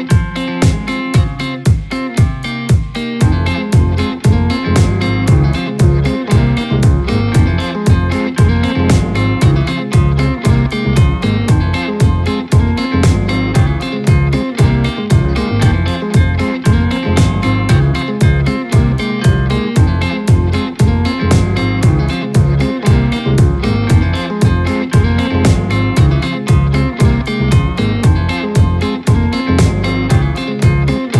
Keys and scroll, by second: 10.9 Return, 12.8 ctrl+KP_Add, 28.1 ctrl+KP_Add, 28.4 ctrl+KP_Add, 28.5 ctrl+KP_Add, 28.6 ctrl+KP_Add, 28.8 s, 29.9 [.